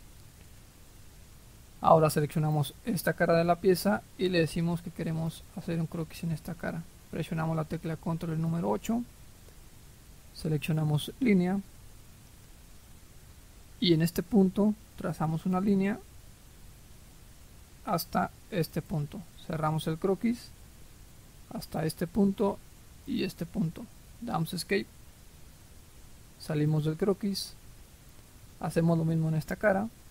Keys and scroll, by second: 8.2 ctrl+8, 24.3 Escape, 25.2 Escape.